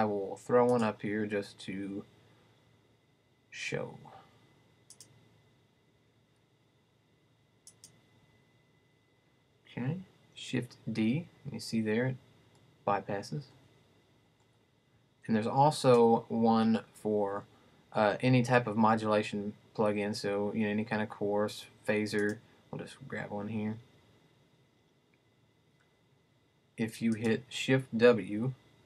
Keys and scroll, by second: 27.9 shift+w.